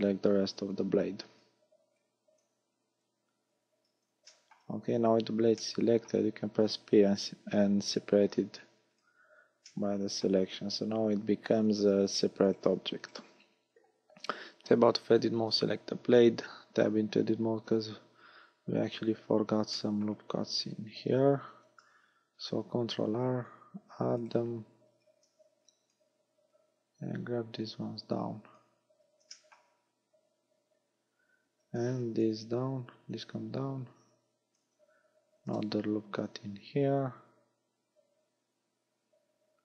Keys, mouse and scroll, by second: 0.6 b, 1.7 b, 2.7 b, 4.3 shift+middle click, 4.8-5.7 scroll up 7, 5.7 middle click, 7.2 p, 9.7 middle click, 10.4 scroll down 6, 11.8 Tab, 12.6 right click, 13.1 right click, 16.7 Tab, 17.9 KP_1, 19.0-19.7 scroll up 7, 19.9 shift+middle click, 20.7 a, 21.6 ctrl+r, 24.3 right click, 25.0 a, 25.6 b, 26.6 click, 29.4 shift+middle click, 31.6 a, 32.0 b, 33.2 click, 35.5 ctrl+r.